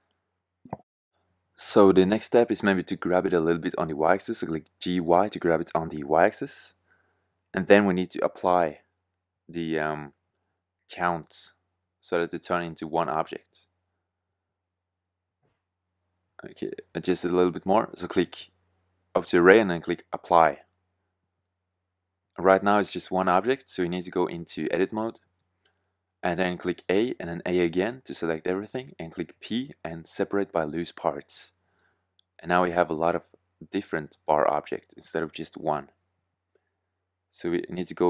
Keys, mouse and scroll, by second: 0.6 shift+z, 3.1 g, 5.4 click, 5.7-7.0 middle drag, 12.5 g, 14.9 g, 26.5 a, 27.0 a, 28.3 p, 37.8 Tab.